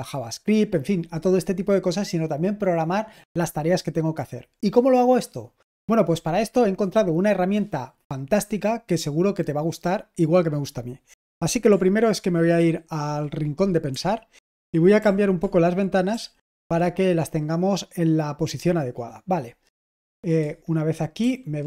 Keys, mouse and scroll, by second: 12.5 ctrl+1, 14.4 super+h, 16.2 s, 21.2 super+h.